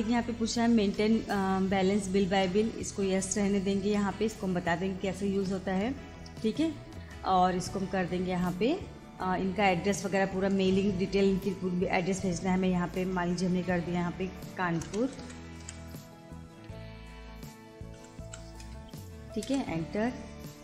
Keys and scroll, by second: 3.9 Return, 5.6 Return, 7.3 Return, 9.1 Return, 14.8 shift+k, 15.0 a, 18.0 u, 18.3 r, 18.6 space, 19.5 Return.